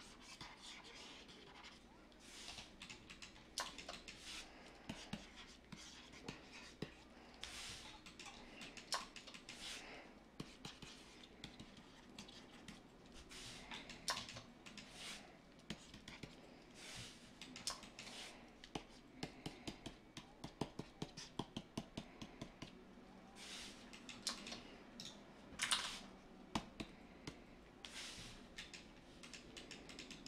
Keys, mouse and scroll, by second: 25.6 ctrl+z.